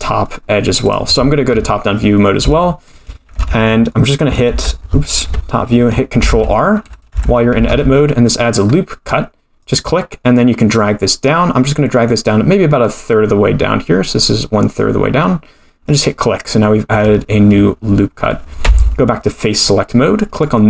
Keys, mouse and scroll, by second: 1.5 KP_7, 2.5 shift+middle click, 3.5 ctrl+z, 3.9 middle click, 4.5 Tab, 5.2 KP_7, 6.3 ctrl+r, 7.1 Tab, 7.7 ctrl+r, 18.6 3, 20.3 click.